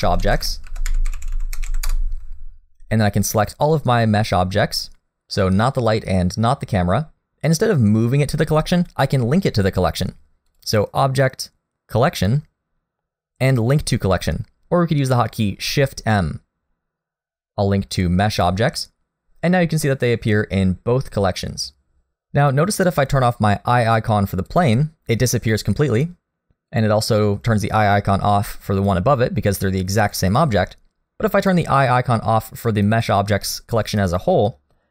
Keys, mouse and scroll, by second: 3.4 click, 10.5 click, 20.6-22.1 scroll down 4, 22.1 click, 24.5 click, 26.5 click, 26.7 click, 30.1 click, 33.0 click.